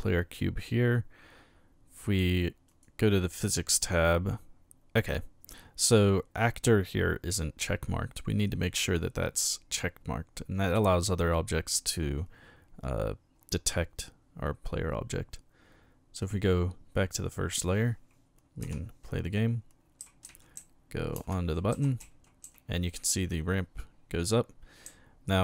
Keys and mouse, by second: 2.7 click, 8.8 click, 16.2 click, 18.6 p, 20.3-22.9 typing, 24.9 a.